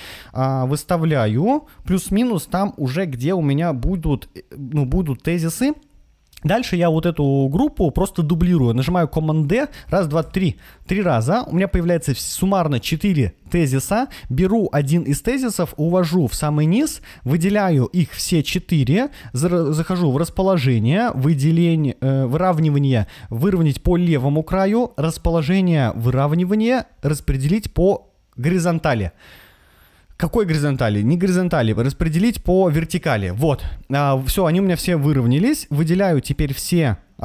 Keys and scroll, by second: 2.1 Right, 3.6 Right, 4.2 Up, 9.6 super+d.